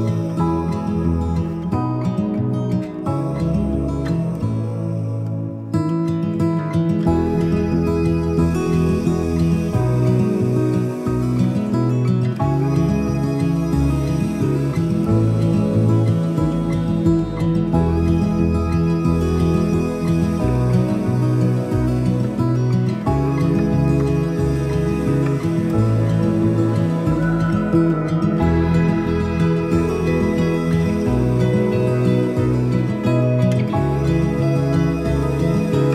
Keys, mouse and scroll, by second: 18.0-25.6 drag, 29.5 alt+Num_Lock, 29.5 click, 34.5 click.